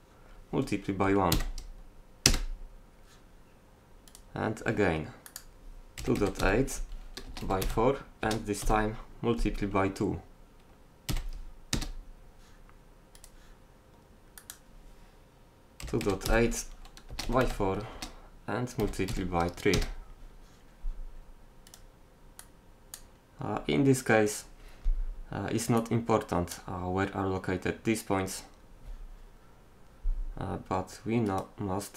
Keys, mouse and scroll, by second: 5.3 middle click, 6.9 click, 13.2-14.4 drag, 14.4 middle click, 15.1-16.3 drag, 23.5-25.8 middle drag, 25.9-27.3 drag, 31.3-31.9 right drag.